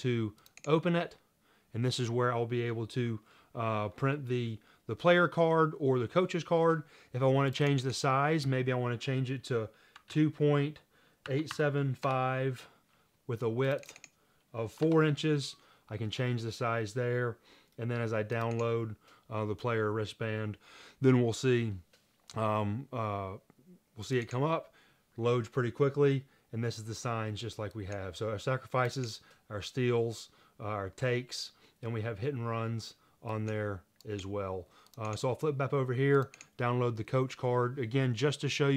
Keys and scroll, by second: 9.9-12.2 typing, 14.8-15.6 typing.